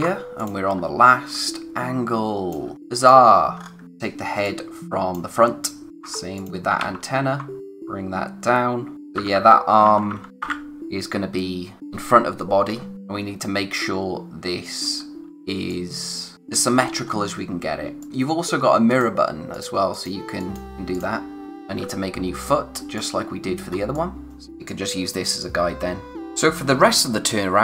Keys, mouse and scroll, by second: 0.4 click, 0.7-1.3 scroll down 1, 1.3 space, 1.5 click, 1.8 space, 3.0 click, 3.8 typing, 4.4 click, 6.0 ctrl+c, 6.4 click, 6.8 ctrl+v, 7.6 click, 9.2-10.1 typing, 12.9 scroll up 1, 14.9-15.5 scroll down 1, 15.5 space, 15.7 click, 16.0 space, 16.8-17.7 scroll up 1, 17.8 space, 18.0 click, 20.6 scroll up 1, 20.9 click, 22.2-23.0 scroll down 1, 23.0 click, 23.8 space, 23.9 click, 25.9 scroll up 1, 26.3 scroll down 1.